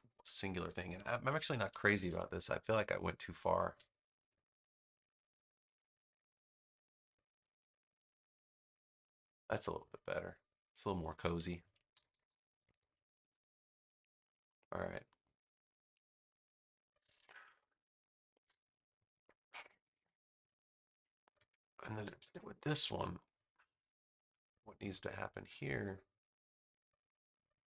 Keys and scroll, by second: 0.9 a, 1.8 super+=, 2.6 space, 11.8 super+-, 13.6 space, 21.9 super+=, 22.7 space.